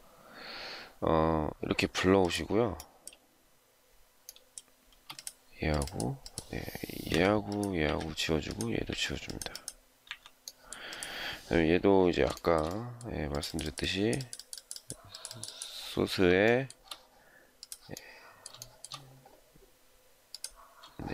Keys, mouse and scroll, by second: 4.8 space, 7.0 Delete, 7.7 Delete, 8.8 Delete, 9.9 Delete, 12.3 shift+middle click, 16.4 shift+middle click, 18.5 shift+middle click, 20.9 shift+scroll down 1.